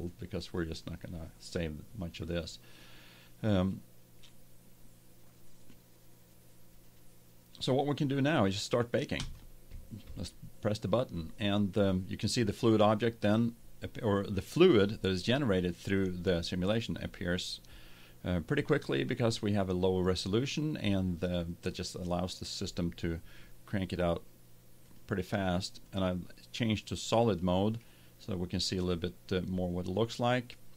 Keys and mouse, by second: 0.0-1.8 drag, 1.8 middle click, 9.1-11.1 drag, 24.8-26.7 drag, 26.7 middle click, 29.5-30.7 middle drag.